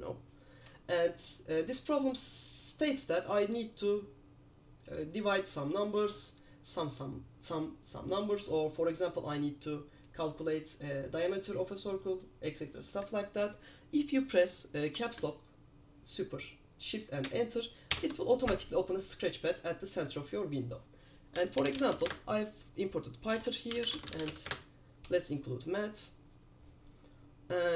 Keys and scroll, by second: 18.0 shift+super+Return, 21.6-22.5 typing, 23.7-24.9 typing.